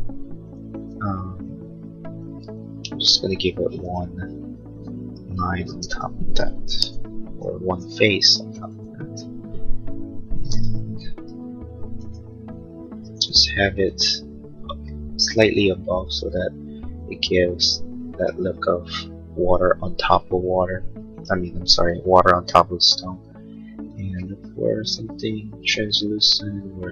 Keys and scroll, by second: 4.7 Escape, 5.7 space, 11.0-13.1 typing.